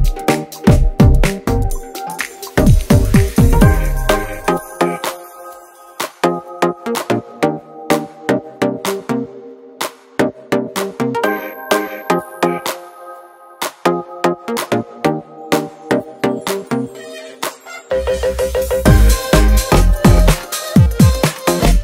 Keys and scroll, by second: 6.5 1, 6.6 Return, 10.4 space, 11.0 space, 12.1-15.3 typing, 21.6 space.